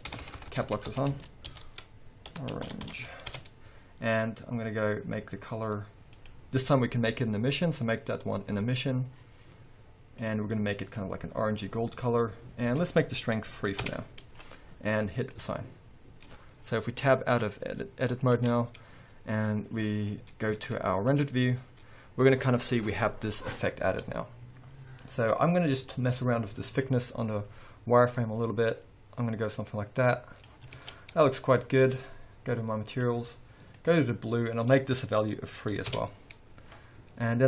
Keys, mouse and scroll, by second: 0.3 BackSpace, 3.5 Return, 12.8-16.4 drag, 14.0 Return, 17.4-26.0 drag, 19.1-20.4 scroll up 2, 20.6 z, 22.1-22.5 scroll down 1, 27.0-33.5 drag, 30.9 alt+a, 33.9 click, 35.2-37.4 drag, 36.1 Return.